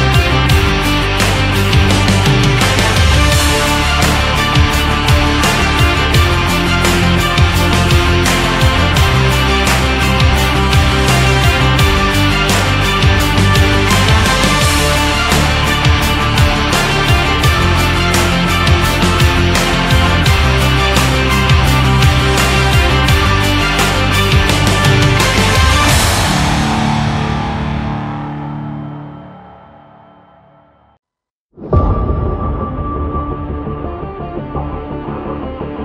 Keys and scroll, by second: 32.9 ctrl+z.